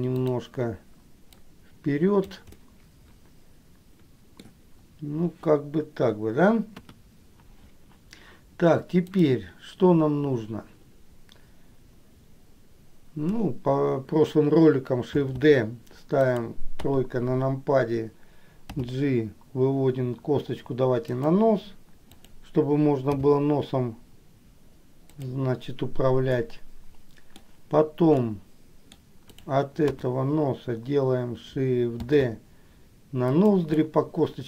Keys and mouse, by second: 0.3 click, 1.6 click, 2.8-4.6 middle drag, 6.9 KP_1, 9.3 click, 15.5 shift+d, 17.0 KP_3, 18.9 g, 22.3 click, 26.6 middle click, 28.5 middle click, 30.1 KP_1, 32.4 shift+d, 33.9-34.4 middle drag.